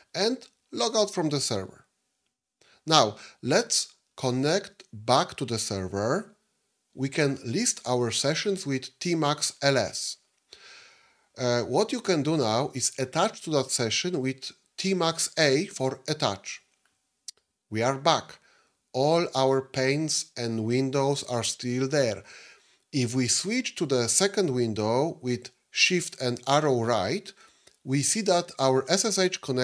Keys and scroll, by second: 25.8 shift+Right.